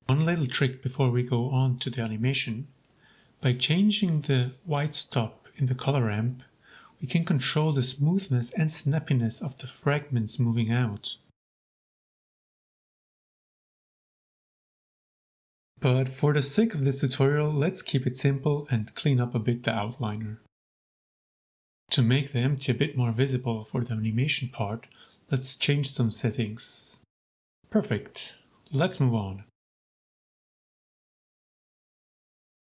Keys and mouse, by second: 0.0 click, 0.9-2.0 drag, 2.9-4.7 drag, 5.2 g, 5.4 z, 7.6 click, 8.1-9.1 drag, 10.5 g, 10.6 z, 14.2 click, 15.0-16.3 drag, 17.6 shift+click, 20.8-21.4 drag, 22.0-22.4 drag, 23.9-25.3 drag, 25.9-27.6 drag, 29.0-32.7 middle drag.